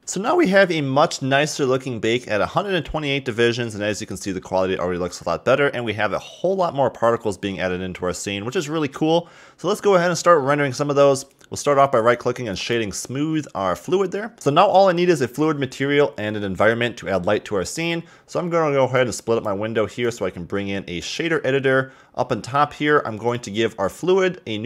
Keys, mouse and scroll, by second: 2.3-2.7 scroll down 1, 2.7-4.0 middle drag, 4.0-4.4 scroll up 1, 4.4-10.1 middle drag, 12.0 right click, 18.9-21.9 drag, 21.9-23.3 scroll up 9, 23.3 click.